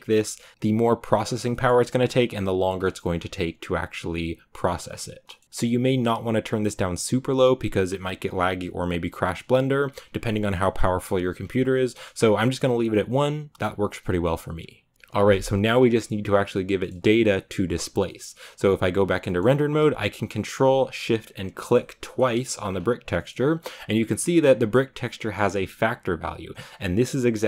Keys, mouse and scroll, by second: 18.8 z, 20.3-21.5 scroll up 2, 21.5 ctrl+shift+click, 22.0 ctrl+shift+click, 22.6 scroll up 2, 24.9-27.4 middle drag.